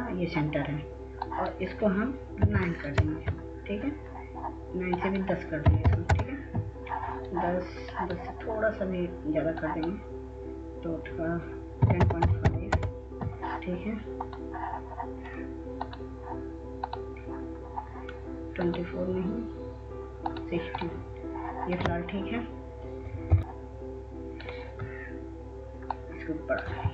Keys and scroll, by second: 3.6 typing, 4.2 Return, 6.6-7.4 typing, 13.0-14.2 typing, 23.4 ctrl+a, 23.4 Delete.